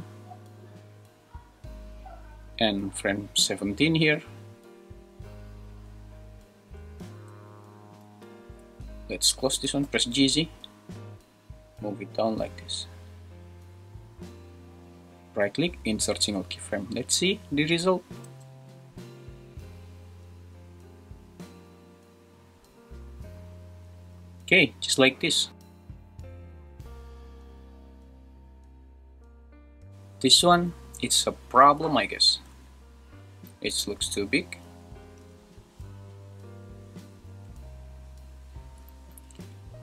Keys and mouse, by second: 3.7 click, 5.3 click, 9.5 g, 9.8 z, 15.9 right click, 18.2 space, 25.5 space, 25.9 super+s, 27.3 n, 29.3 middle click, 30.6 middle click, 32.2 shift+middle click, 33.9 shift+Left, 35.2 space, 37.4 space, 39.0 shift+Left.